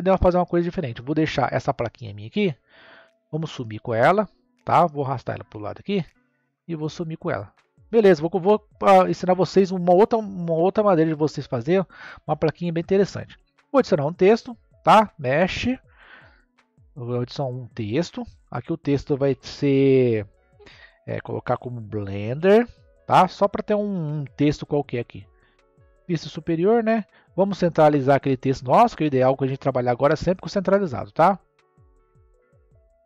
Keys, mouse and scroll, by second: 0.7 scroll down 3, 2.9 n, 5.4 click, 7.3 click, 8.6-11.6 middle drag, 12.2-13.5 drag, 13.5 shift+a, 18.2 Tab, 19.2 BackSpace, 21.5-22.3 typing, 23.1 Tab, 24.6 scroll up 1, 25.4 KP_7, 26.5 scroll up 1, 28.8 scroll down 2.